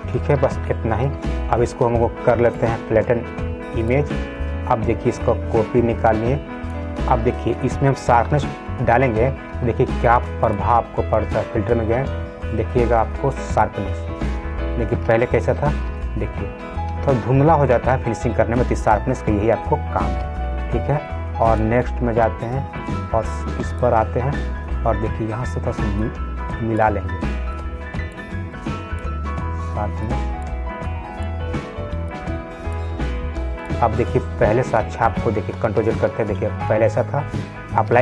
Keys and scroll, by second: 15.8 ctrl+z, 20.5 ctrl+z, 36.1 ctrl+z.